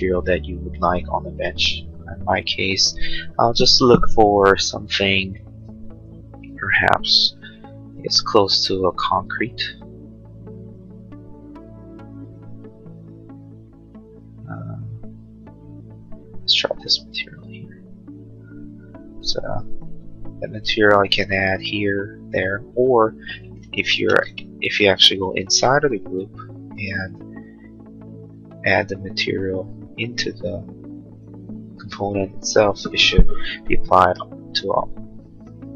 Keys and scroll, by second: 1.8 b, 23.6 ctrl+z, 25.0 space, 26.0 ctrl+a, 26.5 b, 31.7 space, 32.9 Escape.